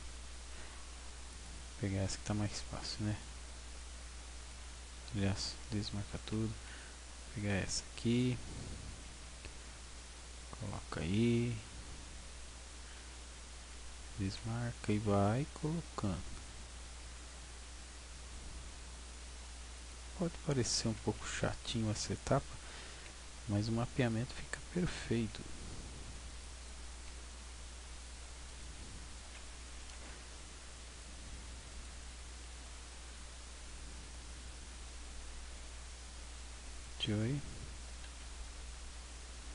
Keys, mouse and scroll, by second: 1.4 click, 2.8 b, 5.4 a, 6.5 b, 9.0 g, 10.9 click, 14.2 a, 14.5 b, 17.0 g, 19.9 click, 20.8 a, 21.0 b, 23.0 g, 24.5 click, 25.2 g, 26.6 click, 27.0 g, 28.6 click, 29.8 a, 30.0 b, 32.6 g, 36.8 click, 37.8 a, 38.2 b.